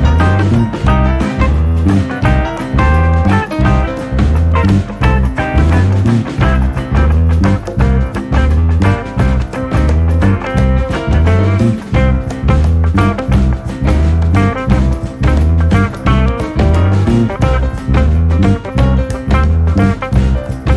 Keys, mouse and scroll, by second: 3.2-3.7 scroll down 6, 3.7-4.9 scroll up 8, 4.9-6.4 scroll down 1, 6.4 ctrl+i, 7.9-8.5 scroll down 5, 8.6-10.9 middle drag, 10.9-11.6 scroll down 1, 11.6-12.2 scroll down 1, 12.2 KP_1, 15.2 e.